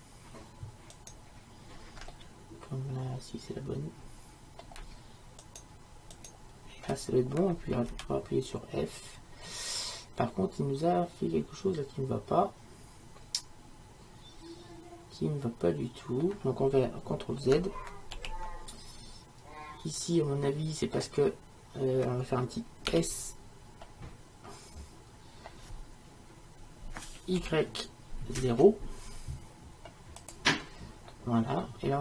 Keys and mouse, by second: 3.0-5.5 middle drag, 5.5-10.4 right drag, 7.9 f, 10.4-12.7 middle drag, 14.0 middle click, 14.2 middle click, 18.2 ctrl+z, 20.6 click, 22.9 s, 31.2-32.0 middle drag.